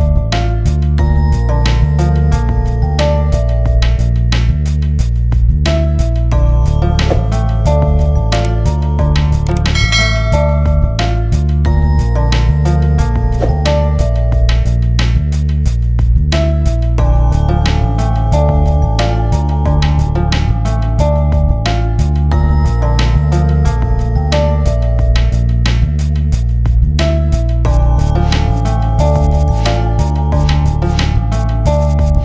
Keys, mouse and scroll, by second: 0.7 ctrl+s, 1.4-4.1 drag, 4.1 ctrl+space, 5.3 F10, 6.3 click, 6.8 ctrl+space, 7.1 shift+click, 7.3 e, 7.8 shift+click, 8.1 c, 8.4 shift+click, 12.1 right click, 13.7 shift+Page_Down, 14.1 ctrl+Page_Up, 15.6 click, 17.2 right click, 18.3 F12, 20.7 click, 23.0 F12, 23.9-24.6 typing, 24.1 click, 28.6 shift+click, 29.1 shift+click, 30.1 click, 31.1 click.